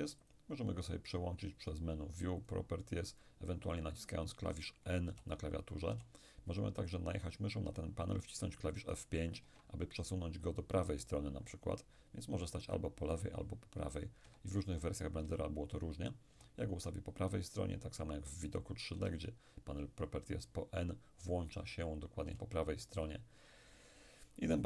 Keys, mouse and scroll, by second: 1.7-4.8 drag, 5.1 n, 5.9 n, 9.5 F5, 13.1 F5, 14.3 F5, 15.3 F5, 19.0 n, 22.3 n.